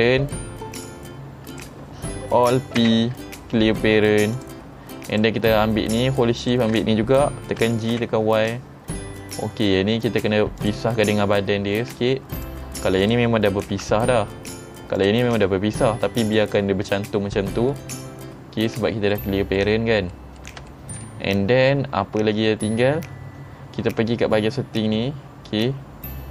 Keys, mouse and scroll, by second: 0.8 click, 1.6 click, 2.9 alt+p, 4.4 click, 5.1 click, 6.5 click, 7.7 g, 10.7 click, 11.1 middle click, 12.4 click, 13.1 click, 13.8 g, 14.5 right click, 15.0 click, 15.5 g, 16.4 right click, 17.8 middle click, 19.2 middle click, 20.2 middle click, 20.8 shift+middle click, 21.4 middle click, 24.4 middle click, 24.4-25.0 scroll down 6, 24.9 middle click, 25.5-26.0 scroll down 7, 25.8 middle click.